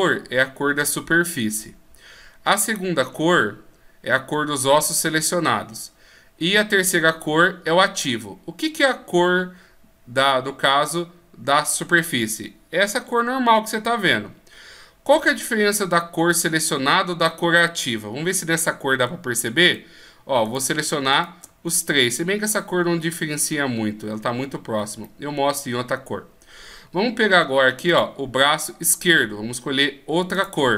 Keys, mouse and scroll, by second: 9.1 scroll up 1, 12.4 scroll up 1, 18.3-19.6 scroll up 1, 19.6 shift+right click, 20.4 shift+right click, 21.1 shift+right click, 22.0 middle click, 24.5 scroll down 1, 25.0 middle click, 27.9 click.